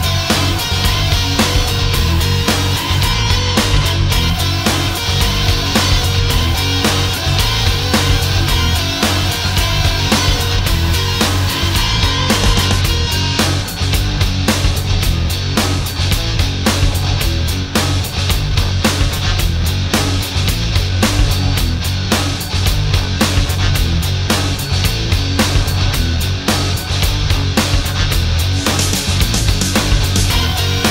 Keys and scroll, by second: 2.3 alt+space, 10.0 ctrl+shift+a, 12.9 alt+space.